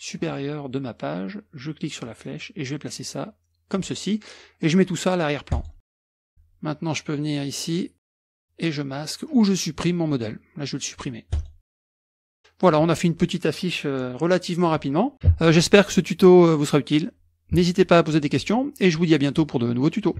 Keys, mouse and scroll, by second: 2.0-3.9 drag, 5.5 click, 6.0 click, 7.5 click, 8.3 click, 9.5 click, 11.3 click, 11.9 middle click, 11.9-12.7 scroll up 1.